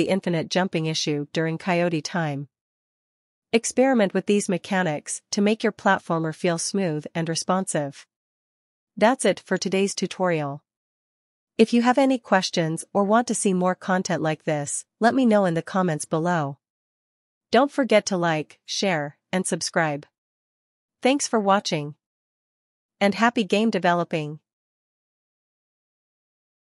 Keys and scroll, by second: 1.8 Up, 3.6 Right.